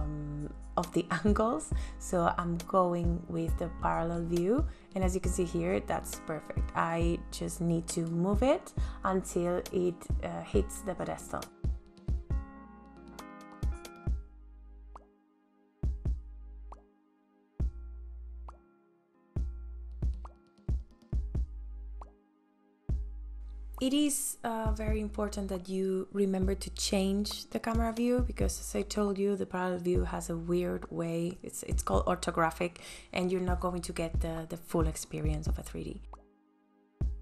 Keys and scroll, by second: 20.8 space.